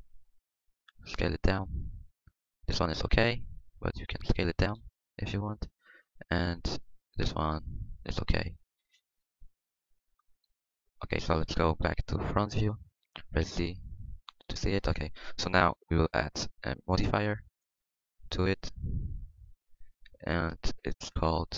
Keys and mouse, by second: 4.8 s, 11.8 KP_1, 13.2 KP_1, 13.5 z, 14.2 z, 14.8 Tab, 15.6 Tab, 20.6-21.5 drag.